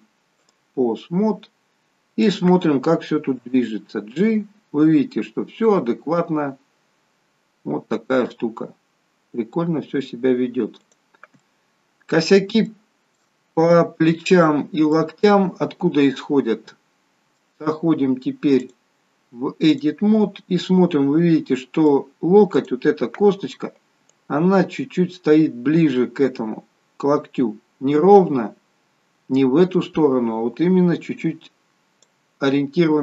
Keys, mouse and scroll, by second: 1.1 scroll down 2, 2.3 click, 3.6 g, 11.5 middle click, 12.5 scroll down 1, 12.7 shift+middle click, 13.5 scroll up 2, 15.0 middle click, 18.6 click, 20.8 middle click, 22.6 click, 24.1 click.